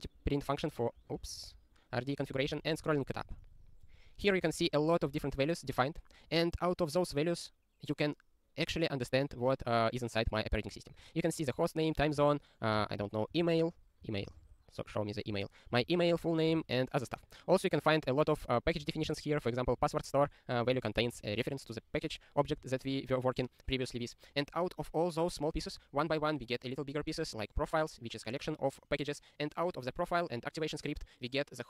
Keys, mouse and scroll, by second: 0.2 click, 1.2 click, 1.4 super+b.